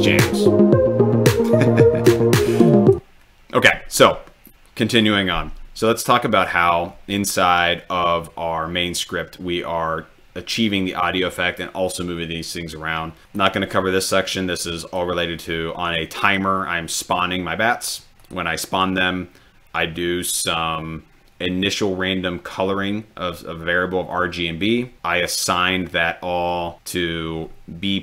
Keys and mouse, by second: 2.7 click, 6.3 click, 13.3 click, 16.2 click, 18.2-18.7 drag.